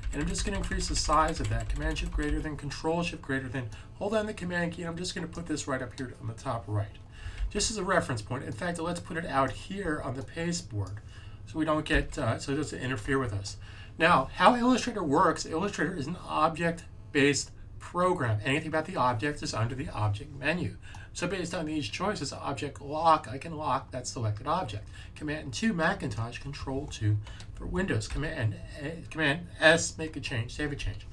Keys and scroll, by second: 0.0-1.7 typing, 7.3 s, 11.8 s, 28.0 super+s.